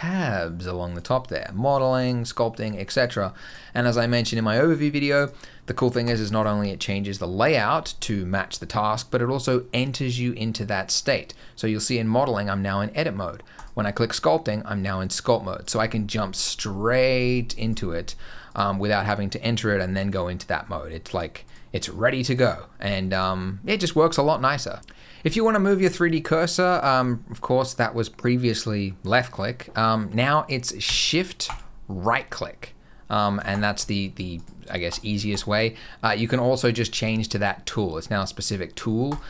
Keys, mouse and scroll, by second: 24.8 click, 31.3 shift+right click, 33.3 shift+right click, 34.2 shift+right click, 34.7 shift+right click, 35.1 shift+right click, 38.9 click.